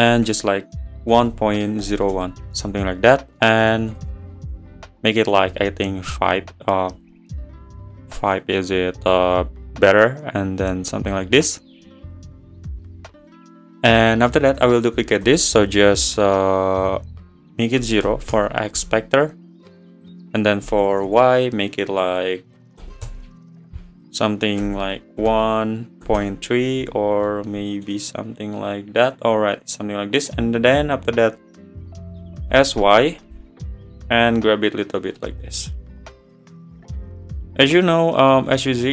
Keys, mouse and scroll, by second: 0.2 BackSpace, 3.6-6.0 drag, 6.0-8.2 scroll down 2, 8.2-9.5 drag, 14.3 click, 15.2 shift+d, 16.5-17.1 scroll down 1, 17.1-19.3 drag, 19.3-19.9 scroll down 1, 19.9 click, 20.9 BackSpace, 21.0 BackSpace, 24.0 click, 24.8 BackSpace, 27.3-28.1 middle drag, 28.1 `, 29.3 scroll up 1, 32.5 scroll up 6, 32.5 s, 35.2 middle drag, 35.4 scroll up 1, 35.6 scroll down 2, 36.0-38.2 middle drag, 38.2-38.9 drag.